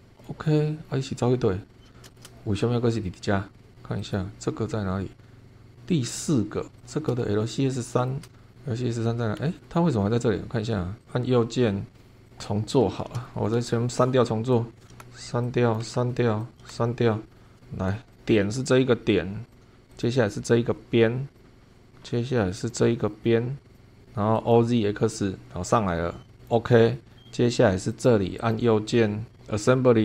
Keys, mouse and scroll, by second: 0.2 click, 0.8 scroll down 1, 1.5 scroll up 1, 2.1 shift+middle click, 2.3-2.6 shift+scroll up 2, 4.0 click, 6.2 scroll down 2, 6.8 click, 7.4-8.2 shift+middle drag, 9.0 space, 12.3 click, 13.2 shift+click, 13.9 shift+click, 14.5 click, 14.8 BackSpace, 15.4 click, 15.8 BackSpace, 16.4 click, 16.6 BackSpace, 17.0-17.4 scroll up 1, 17.4 shift+click, 18.1 click, 19.5 click, 19.9 click, 21.3 click, 21.5 scroll down 1, 21.7 shift+middle click, 22.6 click, 23.7 click, 24.3 click, 26.4 click, 27.1-27.9 scroll down 1, 27.9 click, 28.4 click.